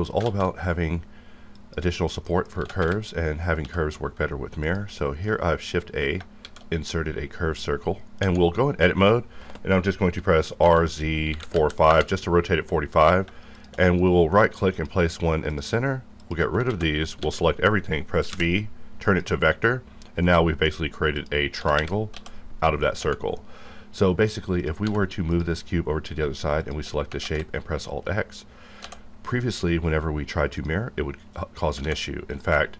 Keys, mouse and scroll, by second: 0.1 shift+a, 1.5 click, 2.2 middle click, 2.6-3.6 typing, 5.0 shift+middle click, 6.3 shift+a, 8.1 Tab, 10.1 r, 10.6 z, 11.3 KP_4, 11.5 KP_5, 11.9 KP_Enter, 12.8 click, 13.5 shift+click, 14.7 click, 16.2 shift+click, 16.7 ctrl+x, 17.2 a, 18.3 typing, 19.0 click, 20.2 middle click, 21.2 click, 21.5 g, 21.8 y, 22.7 click, 23.0 Tab, 23.4 middle click, 23.7-24.3 scroll down 1, 24.3 scroll down 1, 24.5 click, 24.8 g, 25.3 click, 26.6 shift+click, 27.4 x, 30.6 click, 31.3-31.7 scroll down 1, 31.7 alt+a, 32.3 click.